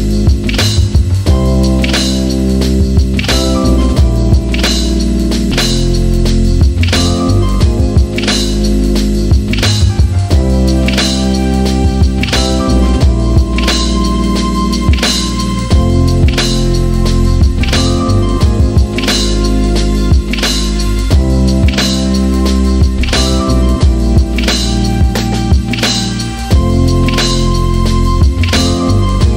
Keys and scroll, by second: 5.5 ctrl+z, 15.0-16.1 typing, 17.2 Return, 20.2-20.5 typing, 22.1 Return.